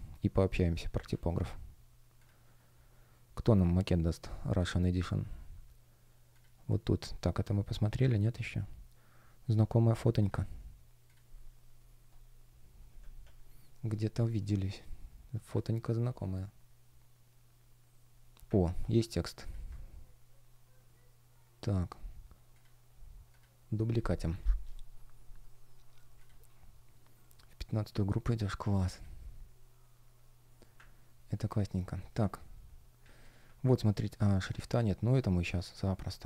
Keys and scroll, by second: 31.7 space.